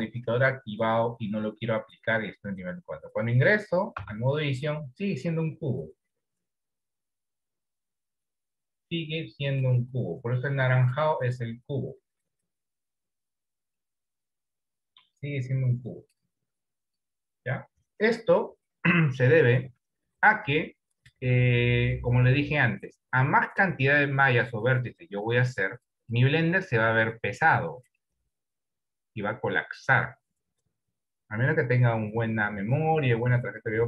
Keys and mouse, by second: 0.1 middle click, 4.3 Tab, 9.3 click, 10.2 click, 11.5 click, 12.4 click, 13.5 click, 14.2 click, 14.6 click, 15.9 click, 16.9 click, 25.6 click, 27.0 click, 27.7 click, 28.1-29.7 drag.